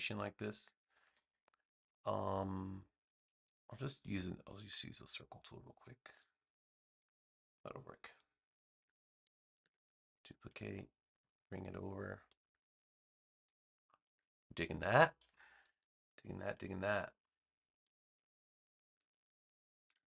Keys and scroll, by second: 8.7 super+j, 9.5 v, 14.5 space.